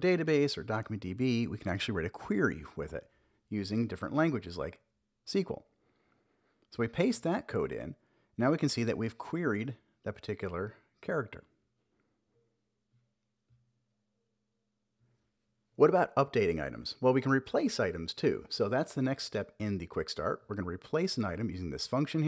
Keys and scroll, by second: 1.3 Return, 1.8 super+v, 2.2 super+s, 5.3 super+j, 5.7 Up, 6.0 Return, 9.1 Return, 10.1 super+j, 17.1 Return, 17.8 super+v, 20.2 super+x.